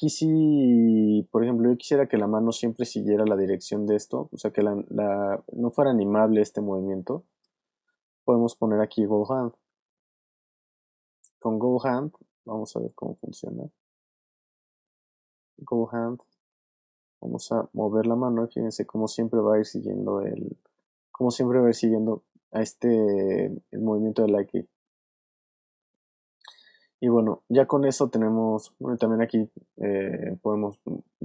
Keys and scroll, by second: 6.0 alt+w, 7.5 super+z, 9.5 super+z, 13.0 super+z, 17.6 v.